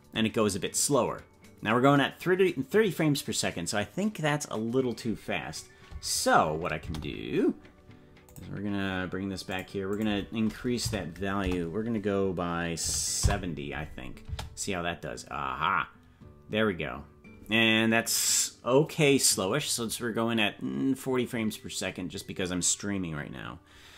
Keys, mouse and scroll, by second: 8.2 space, 14.4 space.